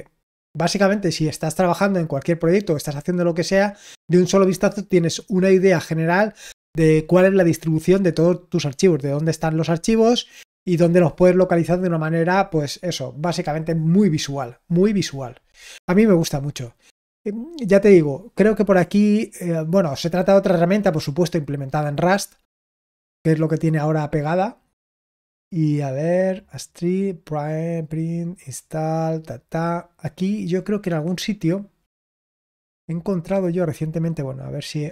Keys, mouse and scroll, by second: 18.9-19.5 scroll up 2, 19.5-21.5 scroll up 1, 21.5 scroll up 1, 22.3-23.6 scroll up 1, 23.6-24.8 scroll up 1, 24.8-25.7 scroll up 1, 25.7-26.5 scroll up 1, 27.8-30.1 scroll down 2, 30.1-30.6 scroll down 2, 31.2-33.8 scroll down 2, 33.8 click, 34.7-34.9 scroll down 2.